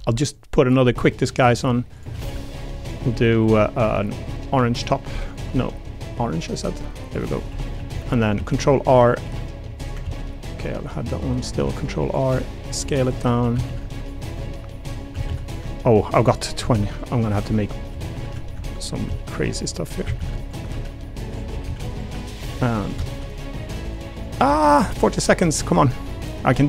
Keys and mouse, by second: 0.0-0.8 typing, 1.9 click, 2.1 a, 2.2 a, 2.4 b, 3.1 g, 5.2 click, 5.4 g, 7.0 click, 7.5 3, 7.7 a, 7.9 a, 8.3 ctrl+r, 8.8 click, 9.2 s, 9.7 click, 10.0 ctrl+z, 10.8 click, 11.1 click, 11.5 ctrl+r, 12.3 s, 13.0 click, 13.3 3, 13.5 a, 13.6 a, 14.0 alt+click, 14.3 click, 15.2 a, 15.3 a, 16.3 ctrl+alt+click, 16.6 a, 16.7 a, 17.9-21.6 typing, 19.5 click, 20.4 alt+click, 21.3 click, 21.9 alt+click, 23.0 shift+click, 23.3 click, 24.1 shift+click, 24.4 click, 24.8 s, 25.6 click.